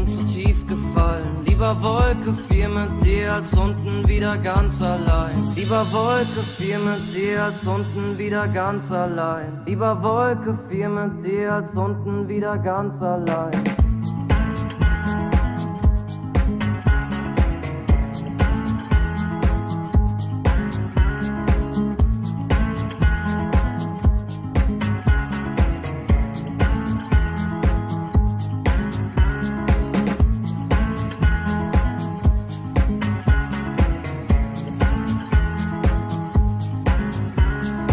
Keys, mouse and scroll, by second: 4.6 Tab, 10.3 Tab, 22.8-23.3 Delete, 23.5 Delete, 23.6 Delete, 23.8 Delete, 23.9 Delete, 24.2 Delete, 24.3 Delete, 24.4 Delete, 24.6 Delete, 24.8 Delete, 24.9 Delete, 25.2-25.7 Delete, 25.9 Delete, 26.1 Delete, 26.3 Delete, 26.4 Delete, 26.9 Delete, 31.4 click.